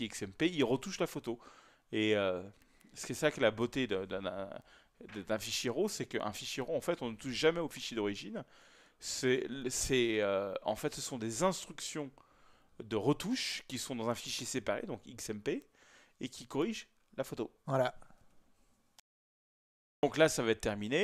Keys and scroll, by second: 19.1 ctrl+p.